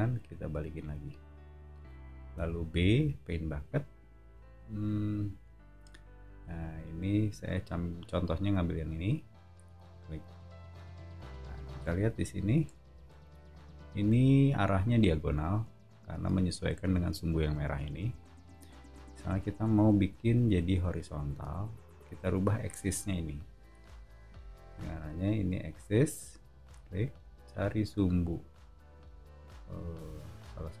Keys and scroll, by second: 2.3 b, 12.2 o.